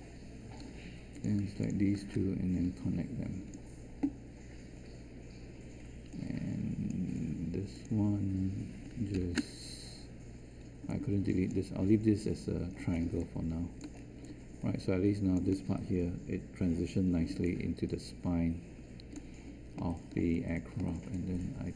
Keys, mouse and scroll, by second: 0.6 q, 9.1 ctrl+Delete.